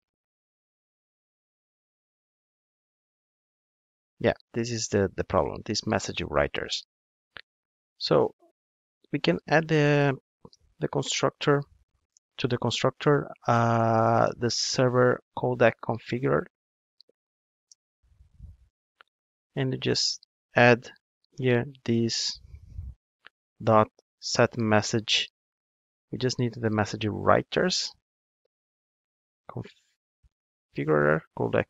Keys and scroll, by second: 17.7 Return, 26.6 Return.